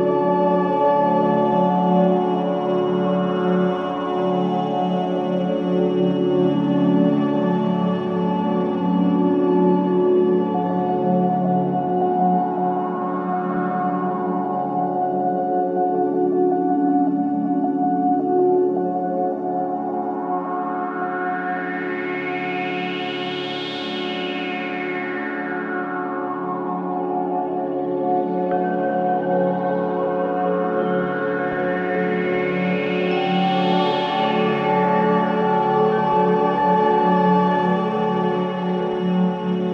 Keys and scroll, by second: 0.3 space, 10.1 space, 20.4 space.